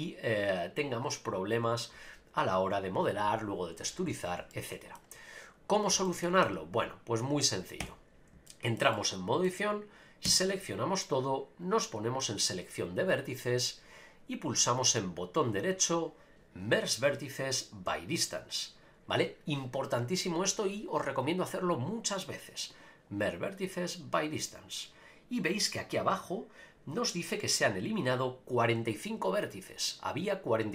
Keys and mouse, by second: 4.5 middle click, 6.0 shift+middle click, 6.4 Tab, 7.8 Tab, 8.5 shift+middle click, 8.9 middle click, 10.2 a, 11.6-13.3 drag, 15.2-18.9 right drag, 20.0-24.2 right drag.